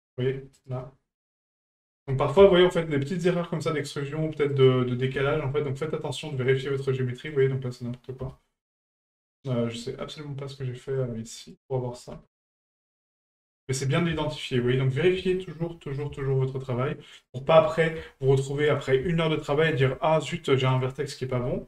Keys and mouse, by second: 1.4 right click, 4.5 right click, 7.3 right click, 11.4 right click, 13.3 middle drag, 14.2 shift+middle drag, 14.8 middle click, 15.4 shift+middle drag, 15.9 middle drag, 16.2 shift+middle drag, 17.1 right click, 19.2 middle drag, 19.5 middle drag, 19.9 middle drag, 20.7 right click.